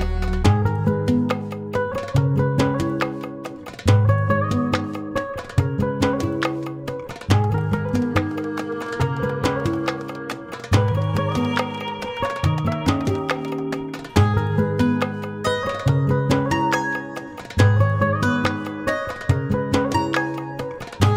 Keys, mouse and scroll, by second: 0.7 F9, 2.6 click, 4.1 ctrl+o, 5.4 click, 6.5 click, 11.3 F4, 12.5 F9, 16.0 ctrl+o, 17.6-18.2 scroll down 1, 19.3 click, 20.1 click.